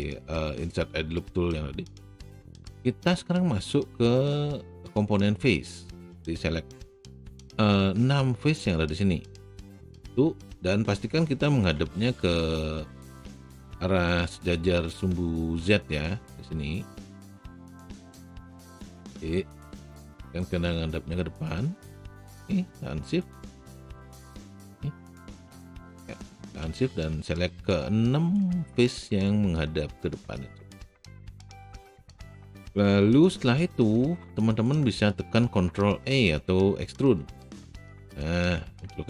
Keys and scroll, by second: 36.8 ctrl+alt+e.